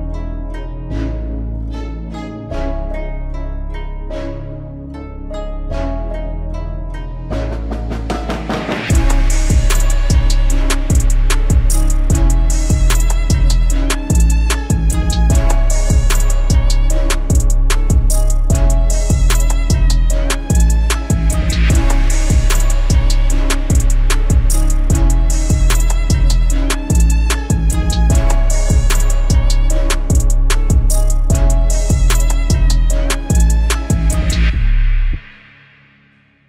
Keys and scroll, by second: 12.2 Down, 12.8 Down, 13.6 Down, 14.0 Down, 14.6 Down, 15.4 Down, 16.1 Down, 16.8 Up, 19.4 Down, 20.0 Down, 21.1 Up, 25.9 Down, 26.6 Up, 27.1 Up, 32.4 Down.